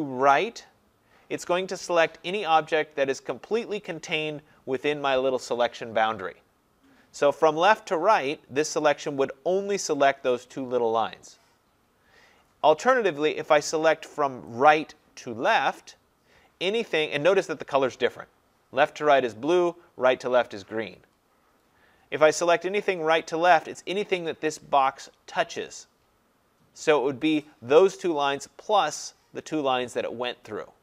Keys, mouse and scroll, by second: 8.8-13.8 drag, 14.8-16.7 drag, 18.3-19.9 drag, 27.4-30.8 drag.